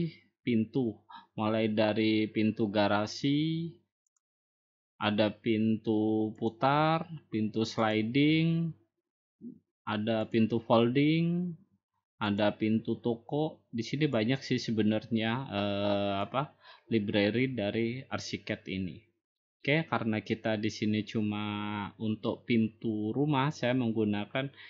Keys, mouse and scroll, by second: 1.0 click, 3.4 click, 4.4 click, 4.8-5.9 drag, 7.2-8.3 drag, 9.3 click, 13.1 click, 15.2-16.0 scroll up 1, 16.0 scroll down 1, 16.7 middle click, 22.0-23.1 drag.